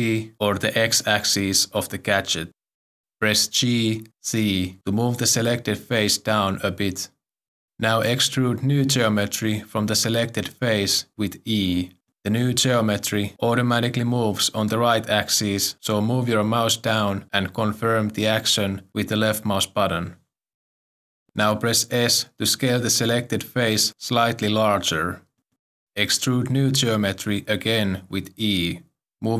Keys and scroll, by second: 3.8 g, 6.3 z, 11.2 z, 13.6 e, 23.7 s, 27.7 s, 28.8 e.